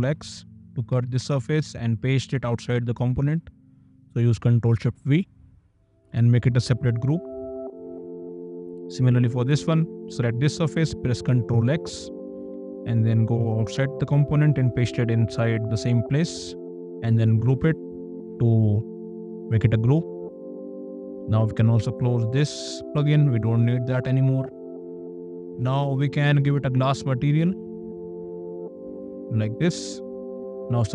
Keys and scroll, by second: 0.2 ctrl+x, 0.9 Escape, 6.6 ctrl+g, 11.9 ctrl+x, 12.5 Escape, 17.7 ctrl+g, 29.7 space.